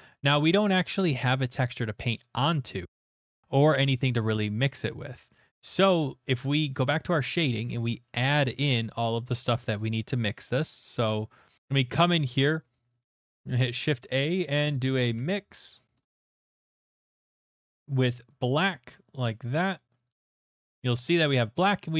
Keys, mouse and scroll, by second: 4.4 middle click, 6.8 click, 7.3 middle click, 7.4 middle click, 8.1 middle click, 8.2 scroll, 9.0 scroll, 10.0 click, 11.6-12.7 scroll, 12.7 click, 13.2 shift+a, 13.6 click, 14.8-15.9 typing, 15.9 middle click, 16.5 click, 17.1 click, 18.0 click, 18.6 click, 19.7 Return, 19.7 click.